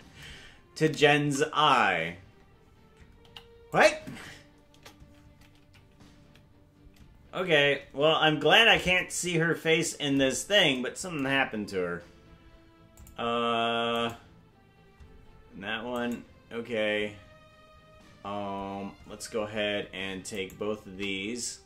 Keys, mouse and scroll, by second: 1.3 a, 3.2 i, 4.7 KP_0, 5.7 Left, 6.3 Right, 8.3 KP_Decimal, 13.0 click, 14.1 right click, 16.1 right click, 20.5 shift+right click.